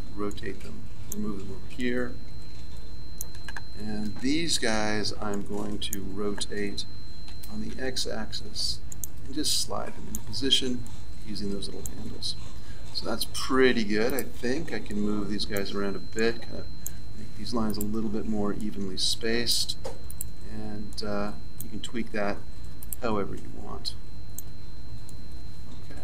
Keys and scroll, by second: 4.0 a.